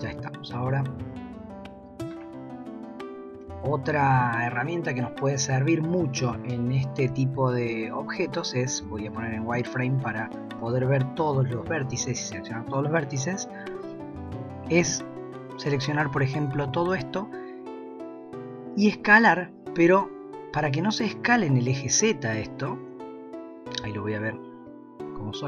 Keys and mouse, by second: 1.3 KP_1, 3.5 shift+middle click, 7.1 z, 11.8 b, 19.0 s, 23.8 z.